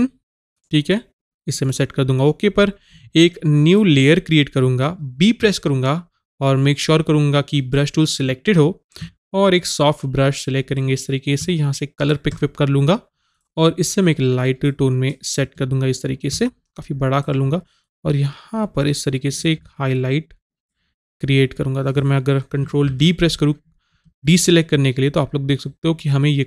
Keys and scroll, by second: 5.5 b.